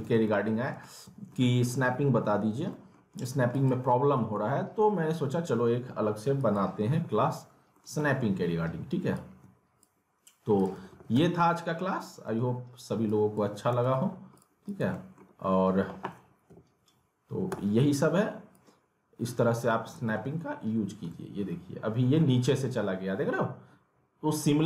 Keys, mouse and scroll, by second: 0.2 alt+middle click, 0.6 scroll down 1, 0.8 alt+middle click, 1.7 alt+w, 2.4 scroll down 1, 2.7 middle click, 3.2 click, 4.1 alt+w, 6.4 click, 6.9 alt+w, 7.7 middle click, 9.1-10.5 shift+drag, 10.7 w, 11.1 z, 11.4-11.9 scroll down 1, 11.9 r, 13.0 click, 13.4 w, 14.3 click, 14.9 middle click, 15.3-16.5 scroll up 1, 16.5 e, 18.5-20.0 drag, 20.0 alt+w, 21.1-24.6 alt+middle drag.